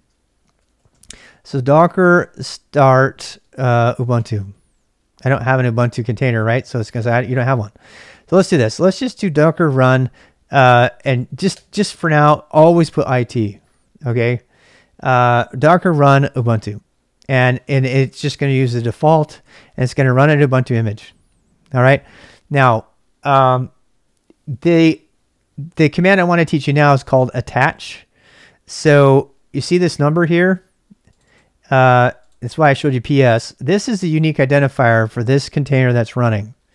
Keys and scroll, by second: 0.0-4.7 typing, 6.1-12.0 typing, 19.6 Return.